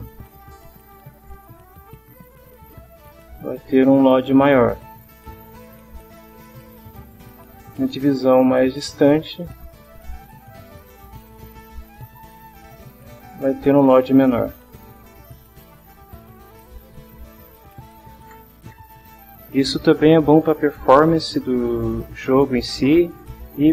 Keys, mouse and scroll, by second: 1.1 click, 2.1 click, 3.3 click, 5.0 middle click, 6.1-7.4 middle drag, 8.6 click, 10.4 click, 10.9 click, 12.2 click, 15.1 click, 17.0 click.